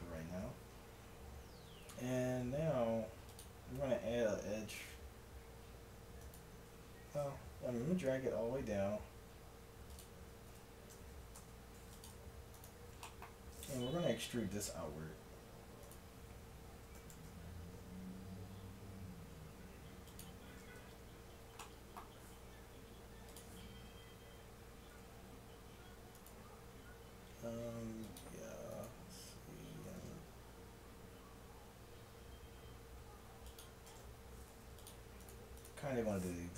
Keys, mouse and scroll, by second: 0.5 Tab, 3.0 ctrl+r, 7.5 g, 10.5 o, 11.4 ctrl+Tab, 12.6-14.3 drag, 14.3 e, 16.8 s, 20.8 a, 21.6-23.8 drag, 24.9 ctrl+r, 27.7 ctrl+r, 29.9 ctrl+b, 33.9 ctrl+Tab, 35.3-36.5 drag.